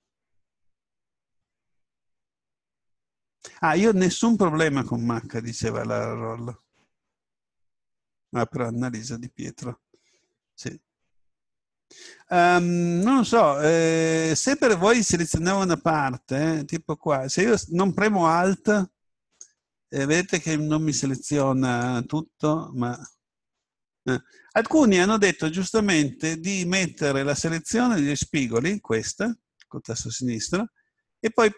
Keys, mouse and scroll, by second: 12.1 a, 15.0 right click, 19.2-23.4 right drag, 25.2-27.1 middle drag, 28.4-30.2 drag.